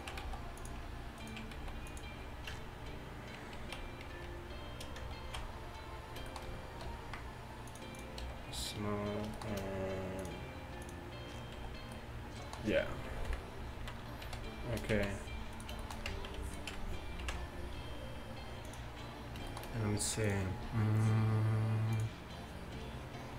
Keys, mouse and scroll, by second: 0.3 s, 1.6 s, 2.6 Tab, 4.1 2, 5.3 ctrl+z, 6.9 t, 7.7-8.3 drag, 8.3 t, 8.7-9.9 drag, 10.2-13.0 drag, 12.5-13.0 right drag, 13.3 KP_1, 13.8 z, 14.3 a, 15.0 z, 15.6-16.1 right drag, 16.1 Tab, 17.3 ctrl+b.